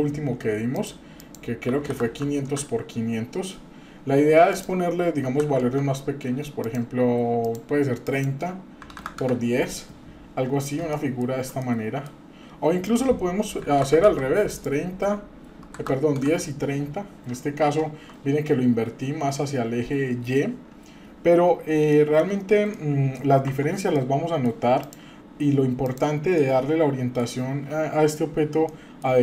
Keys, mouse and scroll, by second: 1.2-2.5 drag, 2.1 KP_0, 3.2-3.7 scroll down 2, 3.7-4.5 scroll up 1, 4.5-5.8 drag, 6.6 click, 8.0-9.3 drag, 9.8-10.8 scroll up 7, 10.9 shift+middle click, 11.6 middle click, 12.9-14.2 drag, 14.5-16.2 drag, 16.5-17.1 scroll down 4, 17.1-17.8 scroll up 4, 21.9 shift+middle click, 22.3-22.7 scroll down 3, 22.7 middle click, 23.5 Tab, 23.9-24.4 middle drag, 24.8 click, 25.8 click, 26.3-27.2 middle drag, 28.1-28.7 scroll down 2, 28.7 middle click.